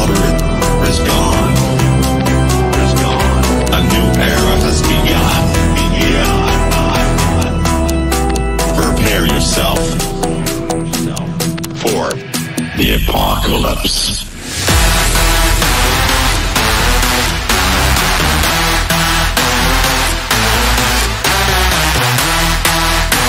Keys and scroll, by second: 6.4 KP_Add.